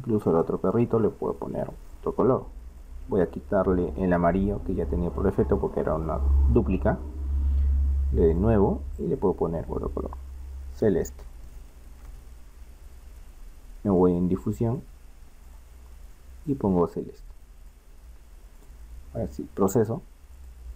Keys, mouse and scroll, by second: 0.3-2.0 right drag, 2.0-6.3 drag, 8.3-11.7 drag, 14.1-18.1 drag, 18.6 click.